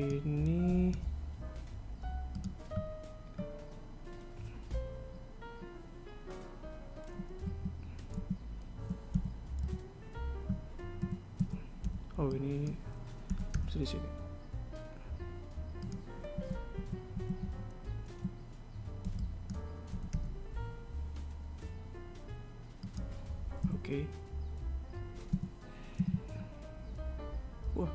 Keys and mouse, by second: 3.4 g, 8.0 z, 8.7 z, 9.7 KP_1, 10.2 KP_3, 11.6 a, 12.0 a, 12.4 b, 16.9 a, 17.3 a, 19.5 b, 24.2 a, 25.9 KP_1, 26.5 z.